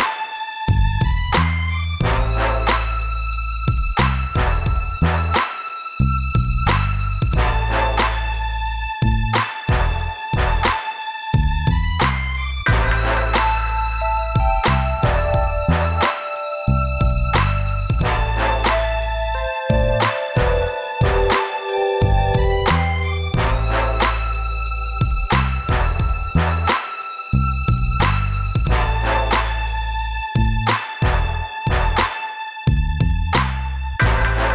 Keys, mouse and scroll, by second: 0.8 click, 5.9 click, 6.5 middle click, 7.2 scroll down 2, 8.0 scroll up 1, 10.3 click, 14.4 click, 16.9 click, 17.0 click, 19.7 click, 21.3 click, 23.7 click, 24.3 right click, 25.2 middle click, 26.4 scroll down 1, 27.2 click, 28.1 scroll down 2, 28.7 click, 28.8 scroll down 1.